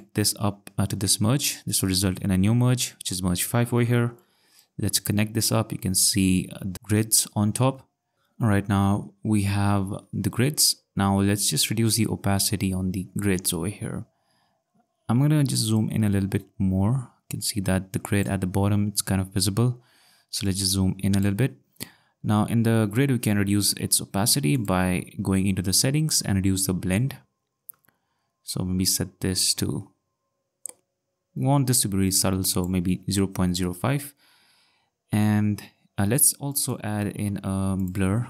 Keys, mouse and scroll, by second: 0.0 click, 1.7 click, 4.2 click, 15.7 click, 20.4 click, 24.6 click, 36.5 click, 37.3 click, 37.8 click.